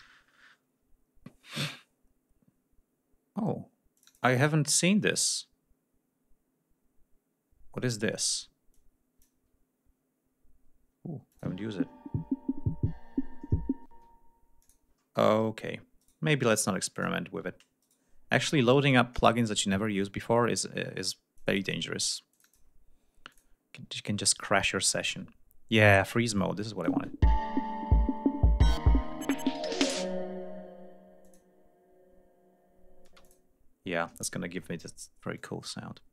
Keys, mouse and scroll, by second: 0.0-0.5 typing, 4.0 click, 4.8 click, 8.8 click, 11.3 click, 11.5 space, 13.9 space, 14.6 click, 16.0 right click, 17.0 click, 17.8 right click, 18.9 click, 21.4 ctrl+click, 22.3 click, 23.3 click, 25.1 ctrl+s, 26.4 click, 26.9 space, 31.3 click, 33.1 space, 33.3 click, 35.4 click.